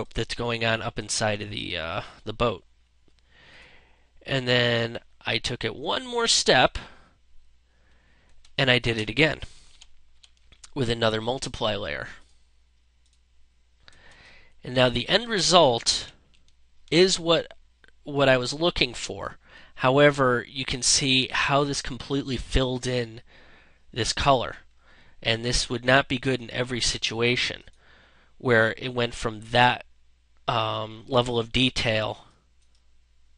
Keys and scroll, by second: 7.8 space, 9.5 ctrl+-, 13.9 space, 15.8 ctrl+-.